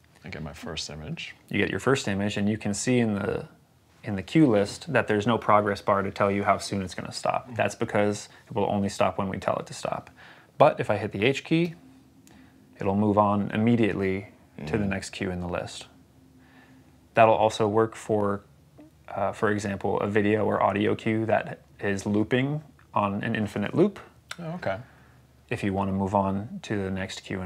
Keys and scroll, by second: 11.5 h.